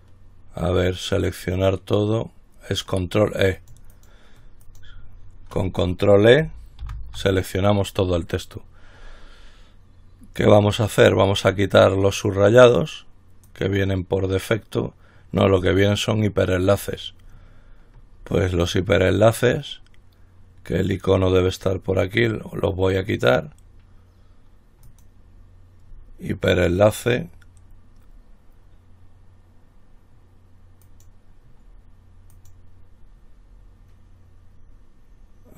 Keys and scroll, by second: 7.1 ctrl+e.